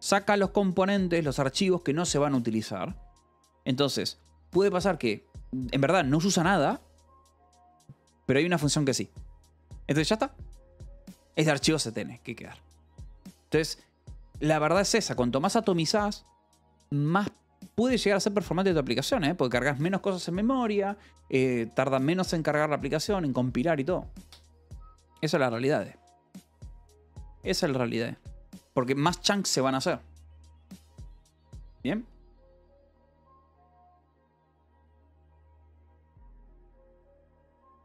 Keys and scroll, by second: 5.2 shift+v, 5.3 Escape, 6.3 shift+v, 9.8 Escape, 15.4 j, 16.1 shift+v, 16.5 Escape, 28.3-29.1 typing.